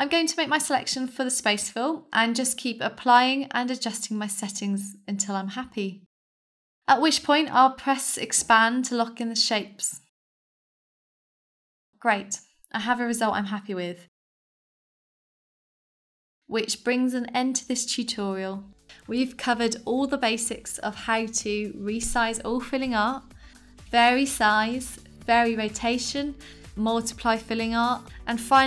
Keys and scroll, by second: 4.3-8.0 typing, 5.9 Return, 6.6 Return, 7.4 Return, 8.1 Return.